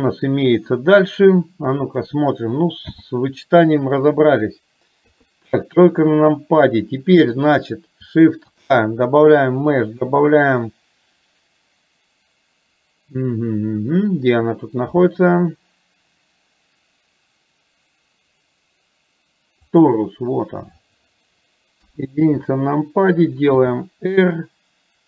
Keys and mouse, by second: 2.3 click, 2.9 n, 5.1 KP_3, 21.9 KP_1, 23.6 r.